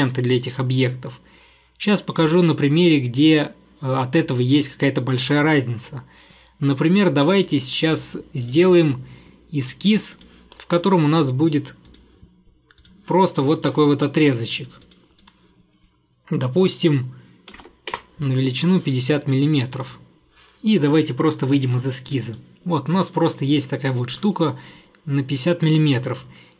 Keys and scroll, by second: 17.4-18.2 typing.